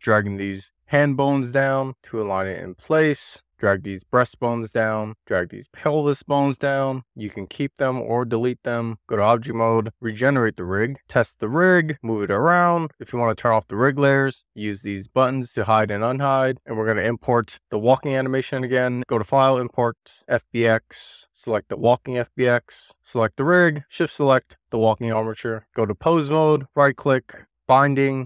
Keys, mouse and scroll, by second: 0.2 middle click, 0.4 scroll up 2, 0.6 click, 0.9 middle click, 1.5 click, 2.2 middle click, 2.5 click, 2.8 middle click, 3.0 click, 3.7-4.8 drag, 5.7 shift+click, 6.6-8.7 drag, 9.4 click, 10.1 click, 11.4 click, 11.8 click, 12.6 super+z, 12.7 click, 12.8 click, 13.2 click, 13.4 click, 14.7 click, 15.0 click, 15.5 drag, 16.1 click, 16.9-20.5 drag, 23.1 click, 24.7 shift+click, 25.5 right click, 25.8 click, 26.8-28.2 right drag.